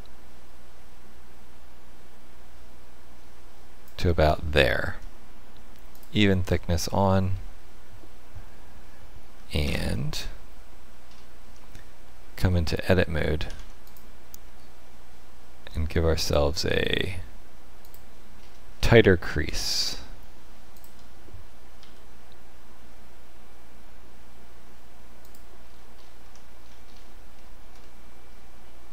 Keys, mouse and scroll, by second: 5.9 click, 7.3 middle click, 9.3 z, 11.0-11.4 scroll up 2, 11.4 Tab, 13.4 ctrl+r, 18.3-18.7 scroll up 3, 18.7 shift+middle click, 19.6 scroll up 1, 20.4 scroll up 3, 20.7 alt+click, 21.7 s, 25.7-27.3 scroll down 10, 26.2 Tab, 27.3 shift+middle click, 27.7 middle click.